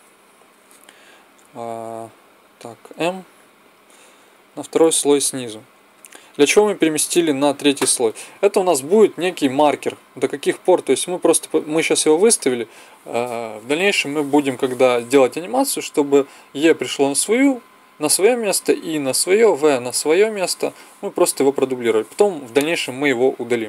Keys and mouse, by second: 2.8 m, 5.9-12.7 drag.